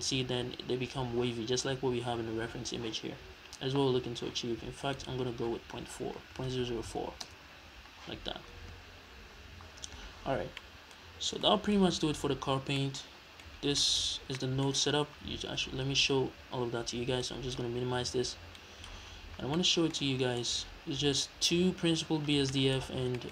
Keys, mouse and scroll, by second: 5.0-10.6 drag, 6.6 KP_0, 7.7 Return, 9.9-10.6 scroll down 2, 10.6-17.3 middle drag, 11.1 scroll up 2, 11.8-12.5 scroll up 2, 12.5-12.8 scroll down 2, 13.6 scroll down 2, 14.1 scroll up 2, 15.0-15.4 scroll down 2, 15.4 scroll up 2, 15.7-17.3 scroll down 2, 17.3-19.6 drag, 19.1 scroll down 1, 19.6 middle click, 20.1-20.4 scroll up 1, 20.4 middle click, 22.8-23.2 scroll up 1, 23.2 middle click.